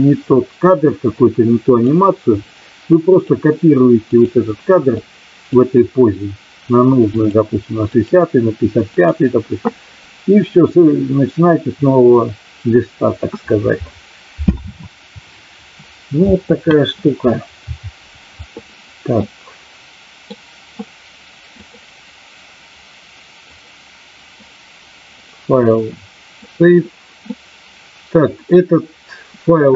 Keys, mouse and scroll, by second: 3.0 click, 4.0 click, 5.0 click, 7.2 click, 7.9 click, 8.9 click, 19.2-20.2 middle drag, 21.6-24.5 drag, 25.3-26.6 drag, 27.3-28.4 middle drag.